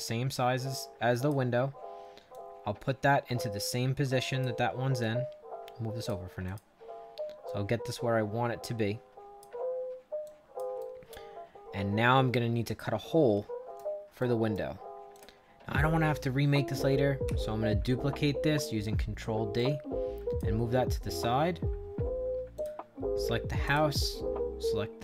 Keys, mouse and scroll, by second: 2.2-4.3 drag, 4.9-6.0 drag, 6.4 click, 7.4-9.3 drag, 10.2 click, 10.7-13.7 right drag, 14.1 right click, 15.0 click, 17.2 ctrl+d, 19.5 click, 22.5 click, 23.6 shift+click.